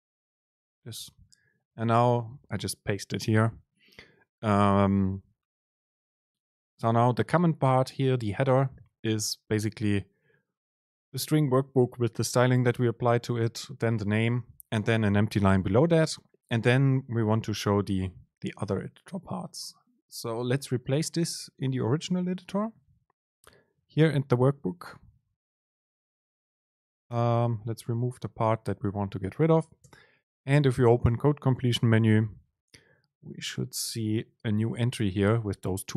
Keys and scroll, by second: 1.1 super+v, 1.2 Down, 1.7 Down, 25.4 shift+Up, 26.4 BackSpace, 27.2 Return, 29.9 super+space.